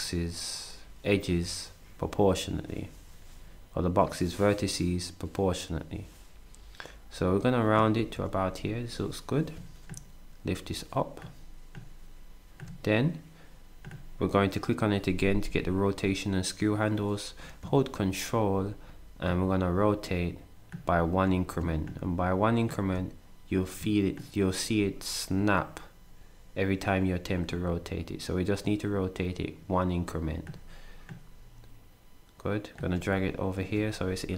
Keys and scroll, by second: 8.0 s.